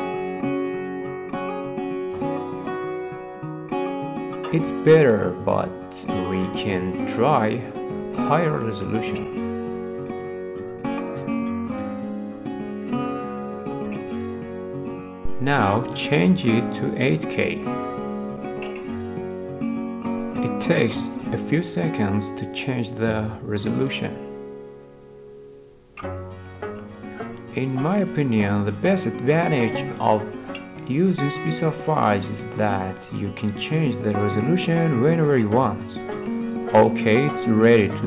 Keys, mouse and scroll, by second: 1.1 scroll, 1.9-2.2 scroll, 2.6 scroll, 3.7 scroll, 6.0-6.4 scroll, 8.5 middle click, 8.9 middle click, 9.0 middle click, 9.2-10.0 scroll, 10.9 click, 12.1 click, 12.9 click, 14.0 scroll, 15.1 click, 16.0 click, 16.5-17.7 drag, 19.6-20.8 middle drag, 19.6 scroll, 21.5-22.7 middle drag, 32.7 middle click, 32.9 middle click, 34.2 click, 34.7 middle click, 34.8 middle click, 35.8 middle click.